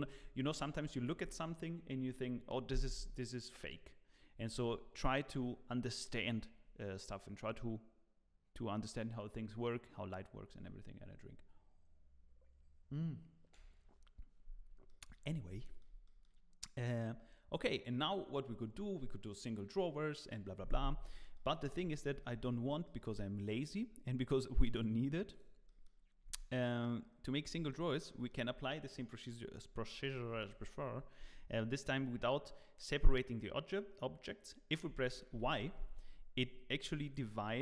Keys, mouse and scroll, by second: 16.1 shift+middle click, 17.2-17.5 scroll down 2, 17.5 scroll, 21.8 z, 22.2-22.8 scroll up 2, 25.7 middle click, 25.7 click, 25.8 click, 26.2 Tab, 26.6 middle click, 27.5 3, 27.6 click, 28.1 middle click, 35.3 y, 36.9 g.